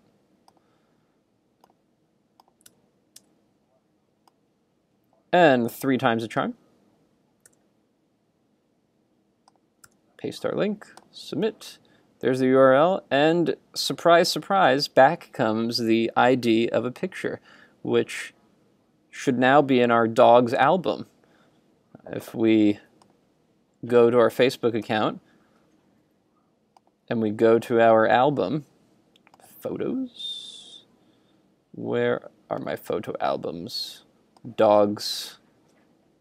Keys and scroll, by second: 2.7 super+Tab, 7.5 super+r, 10.0 super+v.